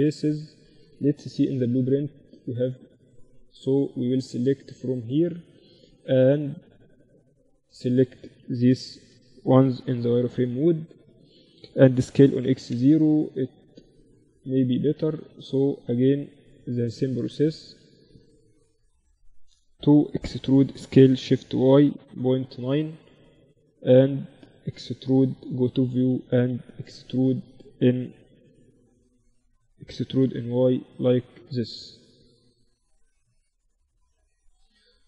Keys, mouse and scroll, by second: 0.6 middle click, 0.6 KP_1, 0.8 z, 2.5-6.6 right drag, 3.3 z, 5.7 a, 6.7-8.4 drag, 7.0-9.2 typing, 11.2 s, 12.8 a, 14.0 click, 14.1 z, 14.6 z, 15.0 click, 15.0-18.6 right drag, 17.0 z, 20.0 e, 22.8 z, 24.7 KP_7, 25.6 z, 27.5 r, 29.4 e, 32.8 z, 34.0 KP_1, 34.8-35.0 middle drag, 34.8 z.